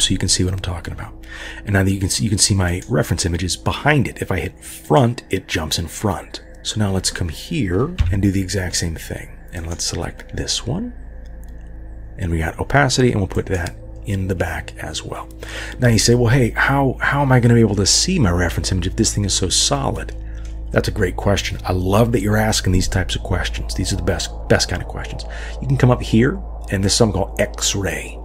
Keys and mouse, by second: 4.8 click, 8.0 KP_3, 9.6 click, 13.4 click, 20.1 middle click.